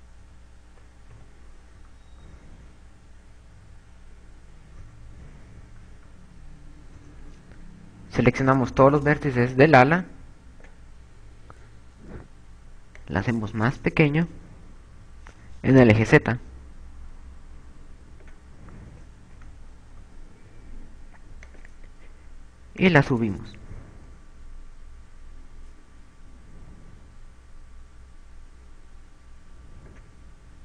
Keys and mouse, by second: 0.0-2.1 typing, 4.8 KP_8, 5.6 KP_2, 8.0 KP_4, 9.1 b, 13.4 click, 19.6 z, 20.9 KP_2, 22.4 click, 23.8 click.